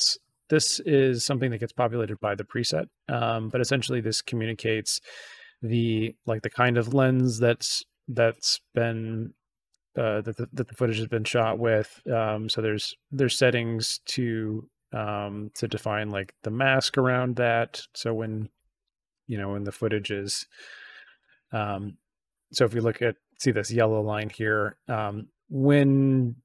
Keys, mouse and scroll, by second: 20.0 click.